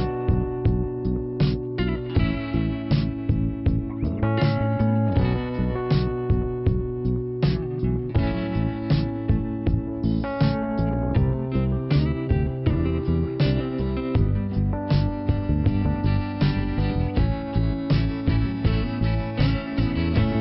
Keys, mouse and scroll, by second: 0.0 click, 1.9 click, 2.0 click, 3.2 click, 4.2 click, 7.7 click, 8.8 click, 10.1 click, 13.0 click, 13.1 click, 13.5 scroll down 1, 14.7 click, 16.6 click, 16.6 click, 19.4 click.